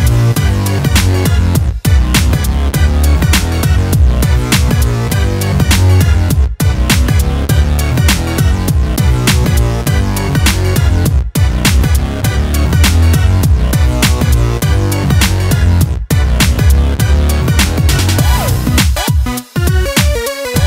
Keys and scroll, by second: 9.7 alt+Delete, 17.5 ctrl+d.